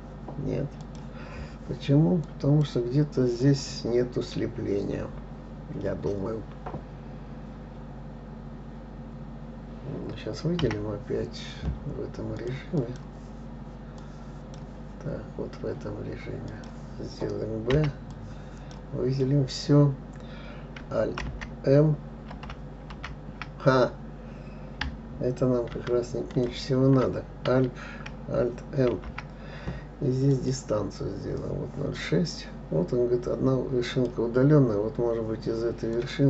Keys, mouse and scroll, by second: 0.0 click, 1.2 click, 1.8-2.6 scroll down 1, 2.6 click, 11.0 b, 13.2-14.4 drag, 16.9 click, 18.1 b, 21.6 alt+n, 23.3 alt+m, 26.7 ctrl+click, 26.7 ctrl+z, 29.3 alt+m, 34.3 click, 35.0-35.7 scroll up 3.